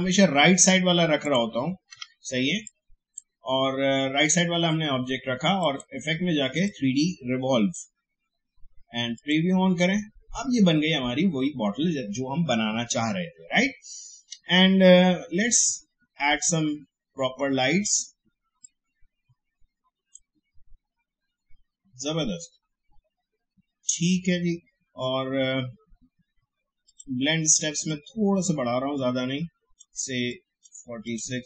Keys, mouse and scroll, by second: 1.2 click, 1.9 Delete, 2.6-9.1 drag, 15.6-31.0 drag.